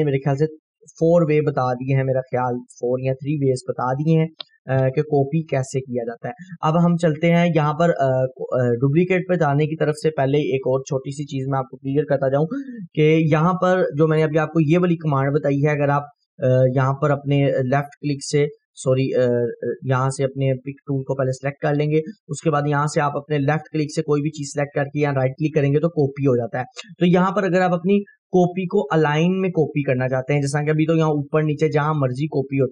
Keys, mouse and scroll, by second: 0.4 F4, 14.3 click, 15.1 scroll up 1, 16.3-18.8 drag, 24.9 right click, 25.8-27.4 drag, 27.7 Delete, 28.5 scroll down 1, 29.1 scroll up 1, 30.5-31.8 click, 31.4 right click, 31.8-32.7 click, 32.4 right click.